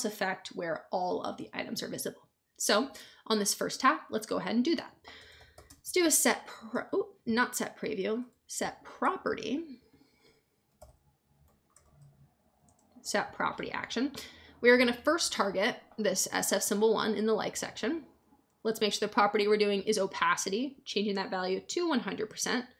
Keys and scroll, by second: 4.9-6.4 typing, 8.2 BackSpace, 10.4-12.5 typing, 12.6 Return.